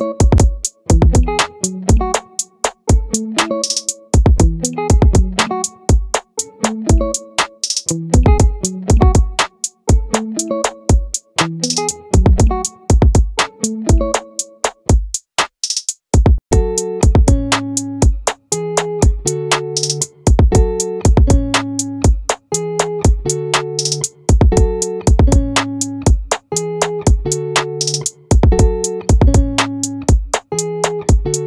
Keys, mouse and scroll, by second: 6.1-7.7 middle drag, 8.1-9.9 drag, 11.1 middle click, 16.5 a, 18.4-19.5 middle drag, 22.9-28.9 drag, 24.1 right click, 28.9 s.